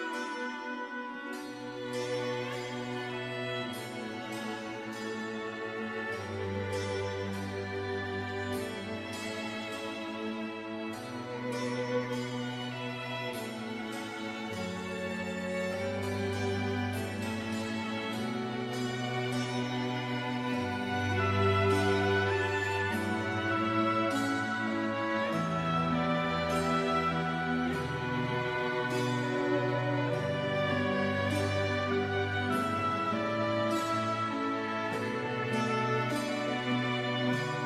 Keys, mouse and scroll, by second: 1.0 KP_5, 1.7 KP_Enter, 3.4 click, 8.2 click, 16.1 click, 19.8 click, 20.9 KP_2, 21.7 KP_Enter, 23.5 click, 26.1 KP_4, 26.7 KP_Enter, 27.8 click, 28.9 KP_3, 29.4 KP_Enter, 33.5 click, 34.5 KP_3, 34.7 KP_6, 34.8 KP_Enter.